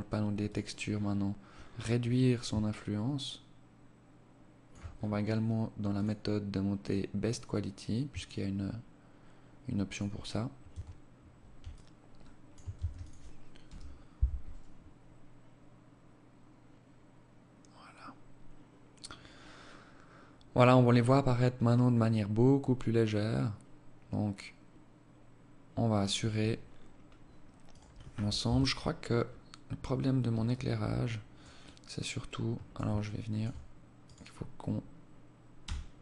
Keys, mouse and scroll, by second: 0.0-1.2 scroll down 18, 1.7 shift+click, 4.0-4.8 scroll down 1, 4.8 scroll down 2, 5.0 click, 7.3 shift+click, 9.7 Tab, 10.7 alt+click, 11.7 ctrl+s, 25.0 Escape, 25.7-26.3 scroll down 8, 26.3 scroll up 1, 26.7 right click, 27.5 KP_3, 29.5 alt+click, 30.7 alt+click, 32.0 alt+shift+click, 33.1 right click, 34.7 g, 35.9 r.